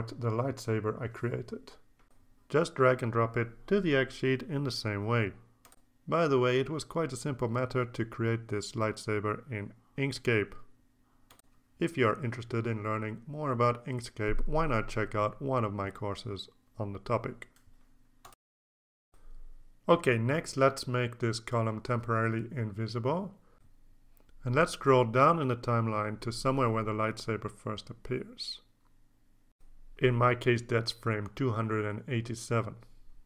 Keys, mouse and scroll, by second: 0.9-2.3 drag, 3.9 click, 5.0 click, 6.1 click, 8.2 click, 19.3 click, 21.3 click, 21.8-22.5 drag, 23.0 click, 26.3 click, 27.2-27.6 ctrl+scroll up 1, 28.3 click, 28.6 click, 29.6 click, 32.8 click.